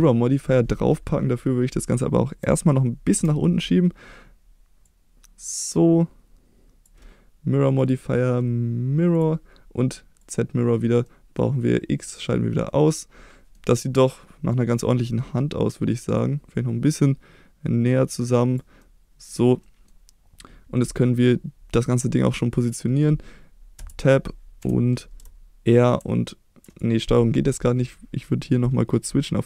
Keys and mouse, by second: 0.8 middle click, 2.4 a, 3.1 KP_1, 4.8-6.8 drag, 10.2 click, 11.0 middle click, 12.0 click, 12.7 middle click, 13.8 middle click, 16.1-18.5 drag, 18.8 middle click, 19.6 middle click, 23.8 Tab, 24.6 KP_7, 25.1 r, 26.6 right click, 28.5-29.4 drag.